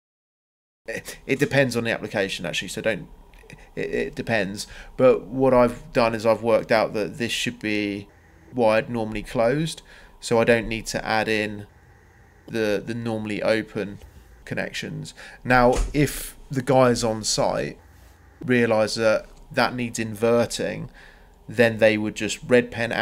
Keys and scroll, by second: 0.4 Delete, 1.1 Delete, 8.6 m, 9.1 Return.